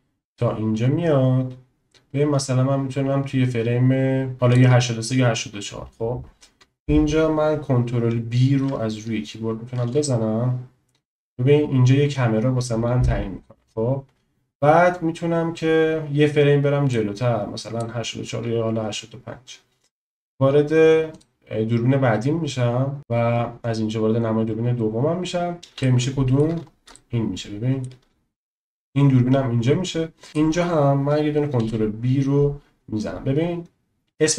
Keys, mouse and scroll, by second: 10.1 ctrl+b, 17.0 click, 21.1 click, 25.8-26.4 shift+drag, 26.9-27.8 shift+drag, 30.3 click, 31.9 ctrl+b.